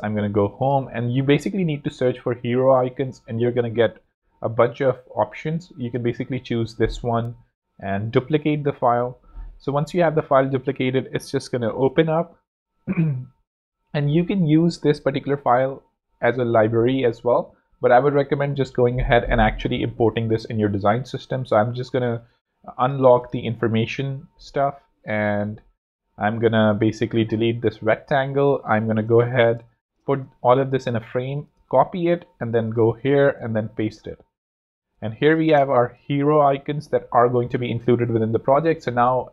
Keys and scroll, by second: 27.1 shift+super+x, 29.2 alt+super+g, 30.3 super+space, 30.5 super+c, 33.4 shift+super+v, 34.7 super+x, 35.0 super+z, 36.1 z.